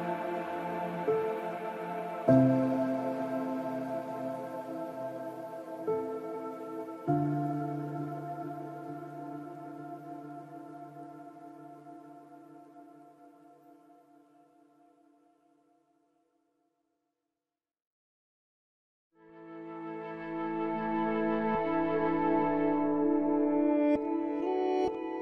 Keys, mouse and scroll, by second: 0.1 ctrl+r, 2.8-7.9 right drag, 3.0 g, 4.1 g, 5.5 g, 6.3 g, 10.5 ctrl+s, 11.1 ctrl+Tab, 12.8 ctrl+Tab, 13.8 right click, 14.5 g, 15.7 ctrl+Tab, 16.7-19.1 right drag, 17.2 c, 19.0 click, 19.1-21.9 middle drag, 20.3 c, 24.8 right click.